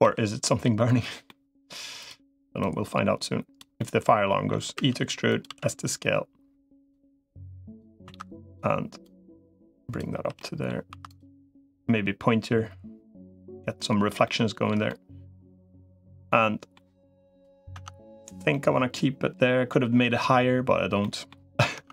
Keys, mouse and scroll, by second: 1.0 middle click, 1.8 click, 2.4-3.4 drag, 3.6 middle click, 4.6 e, 5.2 s, 7.2 click, 8.0 2, 8.2 click, 9.0 click, 10.0 3, 10.2 middle click, 10.8 2, 11.4-14.0 drag, 14.0 middle click, 14.7 middle click, 15.5 middle click, 16.1 middle click, 17.6 Tab, 18.3-19.5 middle drag, 19.9 middle click, 20.8 middle click, 21.6 Tab.